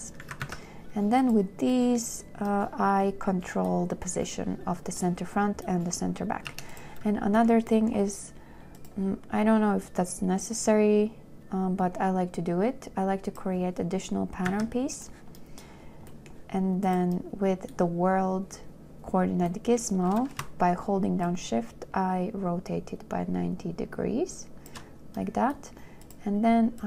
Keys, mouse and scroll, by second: 0.5 a, 0.9 q, 6.8 2, 14.8 a, 21.5 shift+click.